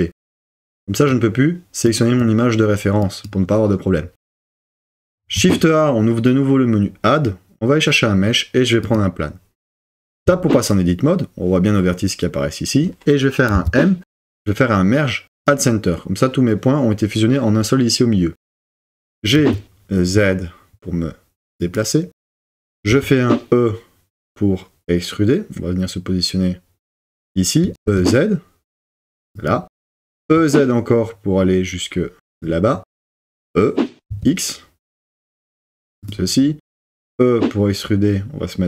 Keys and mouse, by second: 5.3 shift+a, 10.2 Tab, 13.5 m, 19.0 g, 19.4 z, 21.6 click, 22.9 e, 27.6 e, 27.9 z, 29.4 click, 30.0 e, 30.3 z, 32.3 click, 33.2 e, 34.2 x, 36.1 click, 36.7 e.